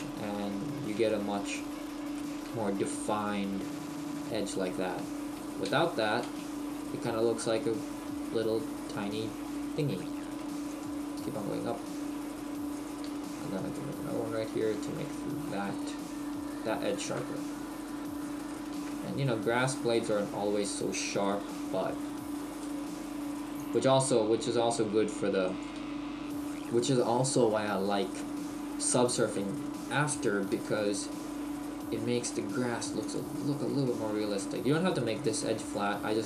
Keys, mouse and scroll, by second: 0.3 Tab, 0.8 scroll up 1, 1.0 shift+middle click, 1.7-2.2 scroll up 2, 2.2 shift+middle click, 2.2-2.7 scroll up 1, 2.7-3.8 scroll up 1, 5.7 ctrl+z, 13.2 ctrl+r, 17.4 Tab, 18.0-19.1 scroll down 2, 18.5 shift+middle click, 19.1-19.6 scroll down 2, 19.7 shift+middle click, 21.1 Tab, 22.5 ctrl+r, 25.7 Tab, 26.3-27.3 scroll down 1, 27.6-28.1 scroll down 1, 28.9 shift+middle click, 29.6-30.6 scroll down 1, 30.6 Tab, 35.7 click.